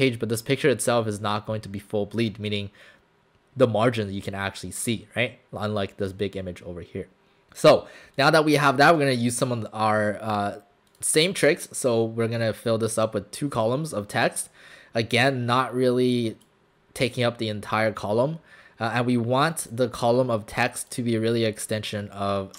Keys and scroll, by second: 8.6 space.